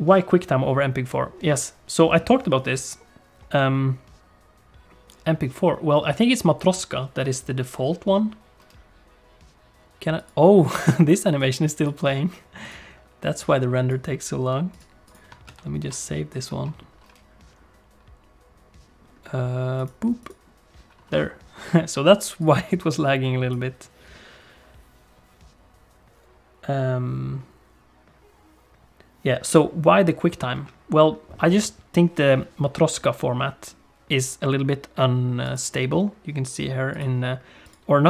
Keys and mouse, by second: 15.5 ctrl+s, 37.6-38.0 drag.